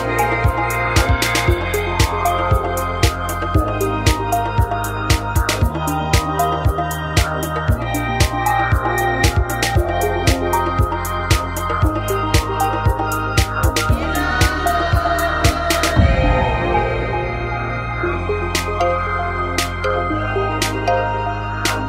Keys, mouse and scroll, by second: 0.5-3.4 right drag, 3.4 KP_3, 4.3 middle click, 4.9 middle click, 5.5 e, 11.5-12.9 drag, 12.9 middle click, 14.2 right click, 14.9 middle click, 15.5 right click, 16.1 f, 16.2 a, 16.6 middle click, 17.5-18.7 right drag, 18.3 f, 18.7 a, 18.9 middle click, 20.3 right click, 21.1-21.8 drag, 21.1 f, 21.2 a.